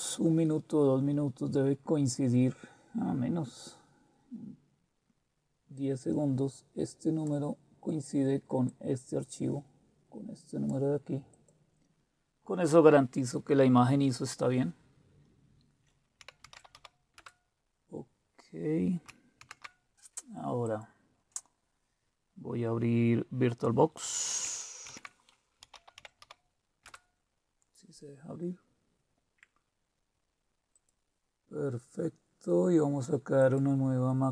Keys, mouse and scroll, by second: 5.7-7.3 drag, 15.9-17.2 typing, 19.4 super+q, 20.6 click, 24.9 super+d, 25.3-26.9 typing, 30.7 click, 33.4 click.